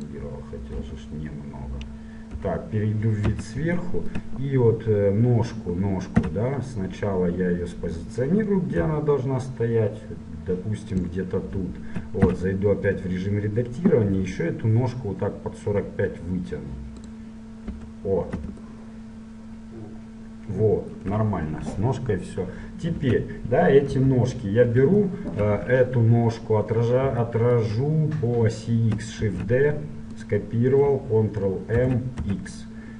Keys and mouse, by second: 0.9 KP_Divide, 2.6 KP_7, 3.1 click, 3.5 z, 6.4 Tab, 9.1 g, 11.5-13.5 drag, 12.5 Tab, 14.4 g, 18.0 KP_1, 23.1 Tab, 24.1 KP_7, 29.4 shift+d, 31.9 ctrl+m.